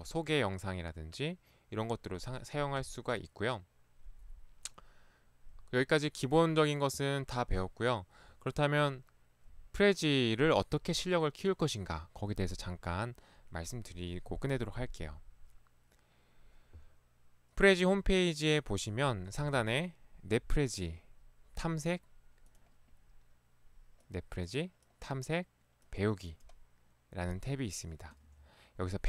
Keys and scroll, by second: 19.4 ctrl+1, 28.3 ctrl+1.